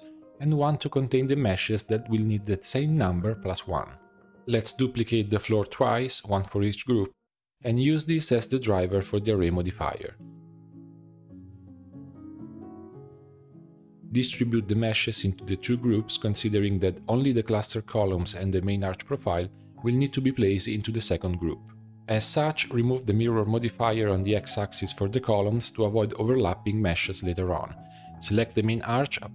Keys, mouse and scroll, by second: 0.0 click, 0.2-3.3 drag, 4.3 middle click, 5.0 shift+d, 6.2 click, 6.8 r, 9.5 click, 10.4-10.7 scroll down 1, 10.7 shift+d, 11.3 click, 12.0 BackSpace, 12.1 BackSpace, 13.3-13.8 drag, 14.5 click, 15.4 click, 16.9 click, 18.0-19.3 drag, 19.3-19.8 scroll up 1, 19.8-21.3 drag, 21.9 middle click, 22.1-24.6 drag, 24.6-25.0 scroll up 1, 25.0 click, 25.3-26.1 middle drag, 26.1 click, 27.4 Delete, 28.2 click, 28.3 Tab, 28.5 shift+middle click, 28.7 click.